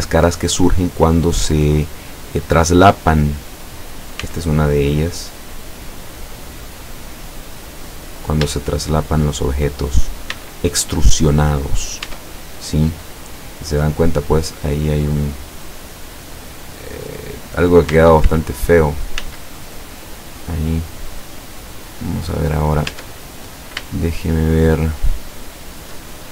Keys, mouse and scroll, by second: 1.0 click, 1.5 scroll up 1, 2.1 scroll down 1, 3.0 right click, 4.2 x, 5.6 click, 6.3-6.7 scroll down 1, 7.8 scroll up 1, 8.6-9.4 shift+middle drag, 9.9 right click, 10.4 x, 10.9 click, 11.7 scroll down 2, 12.1 Tab, 12.6-13.8 middle drag, 14.1 scroll down 2, 14.5 middle click, 15.4-18.1 middle drag, 18.3 ctrl+z, 19.3 ctrl+z, 20.2-20.9 ctrl+middle drag, 20.9 ctrl+scroll down 2, 21.5-22.1 scroll up 2, 22.2 middle click, 23.0 Tab, 23.4 scroll up 2, 23.9-26.2 shift+middle drag.